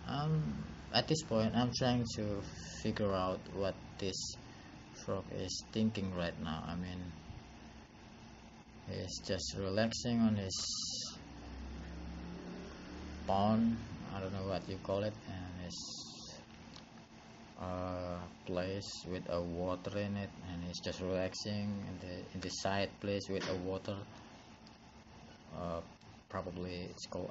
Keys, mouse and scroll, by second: 11.3 click, 15.5 click.